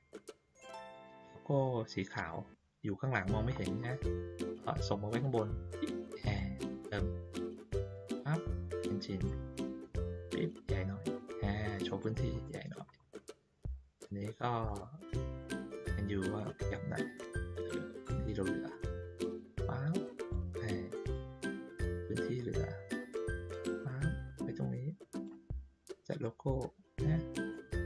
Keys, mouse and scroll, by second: 2.1 click, 3.5 ctrl+middle click, 3.5-3.9 ctrl+scroll up 2, 3.8 ctrl+middle click, 5.2 click, 6.3 middle click, 7.9-9.2 drag, 10.3-12.0 drag, 12.4 middle click, 13.1-13.5 ctrl+scroll down 2, 14.6 click, 15.7-20.3 drag, 21.0 click, 21.7 click, 23.3-25.2 drag, 26.2-26.9 drag, 27.5 middle click.